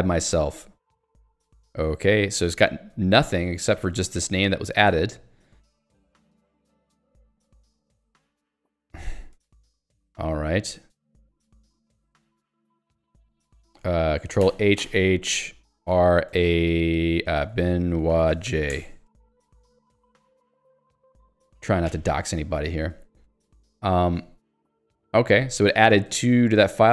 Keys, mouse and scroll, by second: 1.5 k, 1.9 j, 2.9 k, 3.9 ctrl+s, 5.9-8.4 typing, 9.1 ctrl+s, 10.9 alt+x, 12.7 ctrl+g, 13.2 alt+x, 13.7 ctrl+g, 15.8-19.0 typing, 20.1 j, 20.7 k, 21.9 j, 24.0 click, 24.3 q, 25.1 click, 26.2 ctrl+s, 26.7 super+e.